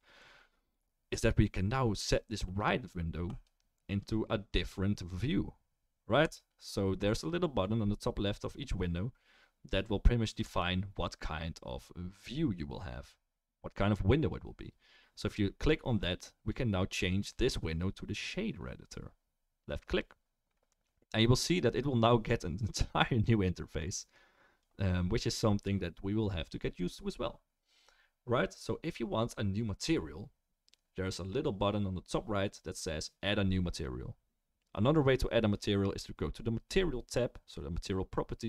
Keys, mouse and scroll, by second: 6.3 click.